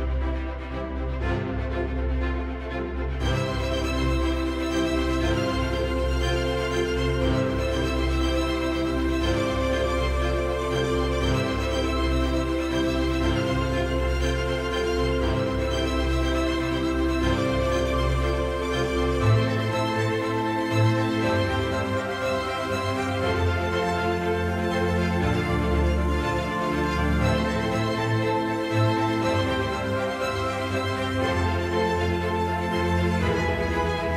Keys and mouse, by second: 2.1-8.8 right drag, 9.9-19.4 right drag, 20.6-24.9 right drag, 25.9-28.6 right drag, 29.1-31.8 right drag, 33.3-34.1 right drag.